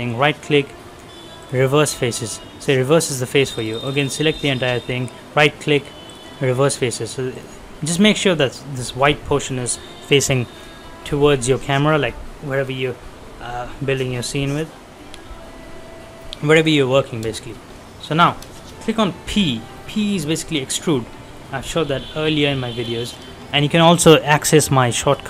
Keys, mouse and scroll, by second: 1.3 click, 1.9 scroll down 1, 2.1 middle click, 2.6 scroll up 1, 3.4 click, 4.3 right click, 6.0 click, 6.5 scroll down 1, 6.8 middle click, 6.8 middle click, 7.3 click, 7.5 scroll up 1, 9.7 scroll up 1, 15.8-17.0 scroll up 1, 17.4 shift+middle click, 17.7 scroll up 1, 18.1 middle click, 19.2 p, 20.1 scroll up 1, 21.9 middle click, 22.6 shift+middle click.